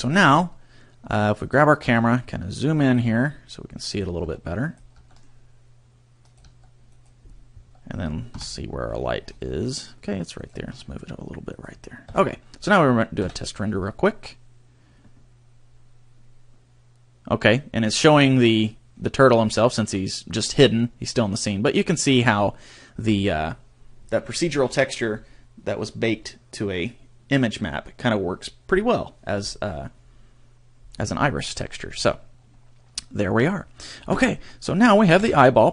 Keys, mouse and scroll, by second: 1.4 right click, 1.8 g, 2.9 click, 3.0 g, 4.0 click, 4.2 g, 4.7 click, 4.9 g, 6.3 click, 6.4 g, 7.0 click, 8.3 KP_7, 9.0-9.7 scroll down 12, 10.4 right click, 10.6 g, 11.6 click, 12.0 KP_0, 34.1 Escape, 34.1-35.1 scroll down 4, 35.2 KP_1.